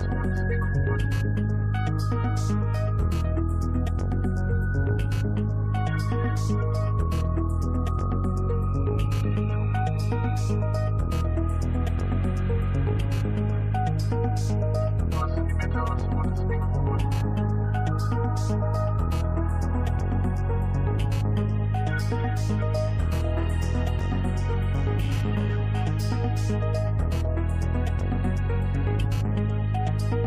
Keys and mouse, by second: 3.4-6.9 drag, 9.6 shift+a, 18.8-21.6 drag, 20.6 0, 23.3 middle click, 23.4 click, 23.5 middle click, 24.3-25.3 middle drag.